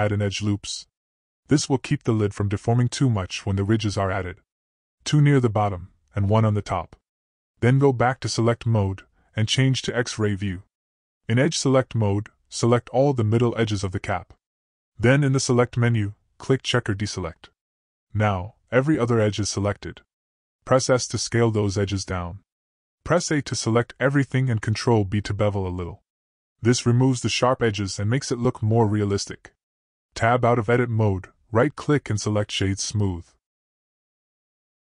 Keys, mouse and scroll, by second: 0.8-2.1 drag, 2.8-4.6 drag, 4.6 typing, 5.1 middle click, 5.6-6.8 drag, 8.6 click, 9.2 middle click, 11.8 click, 12.4 click, 15.4 click, 15.5 middle click, 17.3-18.9 drag, 18.9 middle click, 20.4 middle click, 21.3 s, 24.3 click, 26.2 a, 27.3 ctrl+b, 30.8 click, 31.6 Tab, 31.9 right click, 32.6-33.1 drag, 33.1-34.9 middle drag.